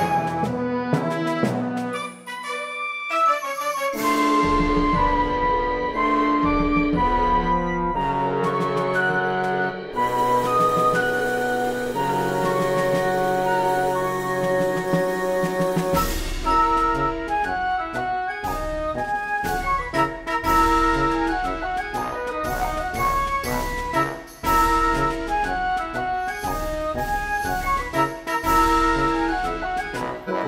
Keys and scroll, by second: 1.6 ctrl+z, 6.8 space, 10.3 shift+h, 10.5 Return, 11.1 space.